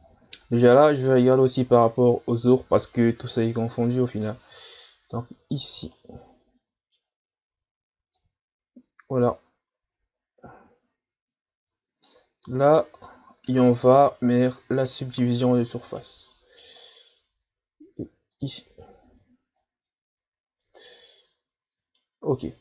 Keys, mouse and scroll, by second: 0.0-0.4 shift+scroll down 5, 0.4 middle click, 0.7-1.1 scroll up 2, 1.1-4.2 middle drag, 4.2-5.9 drag, 5.9-8.1 middle drag, 8.1-11.2 drag, 13.0-16.0 drag, 16.0-18.4 middle drag, 18.4-19.6 drag, 19.6-20.0 scroll down 3, 20.1-20.6 scroll down 7, 20.6-22.6 middle drag.